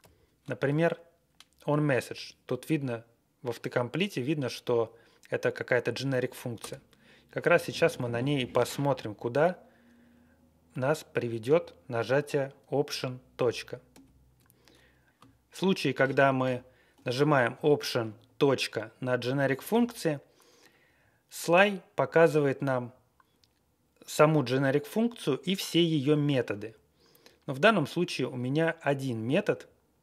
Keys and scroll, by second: 0.0 ctrl+n, 6.5 Return, 7.4 Left, 7.6 Left, 7.7 Left, 7.9 Left, 13.9 alt+., 21.9 Down, 22.8-23.2 Right, 29.6-30.0 Right.